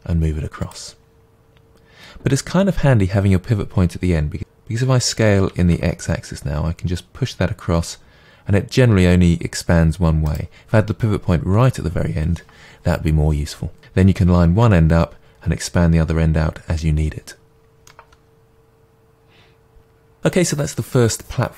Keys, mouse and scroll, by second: 0.7 click, 4.4 right click, 5.5 s, 10.3 right click, 17.8-21.5 middle drag.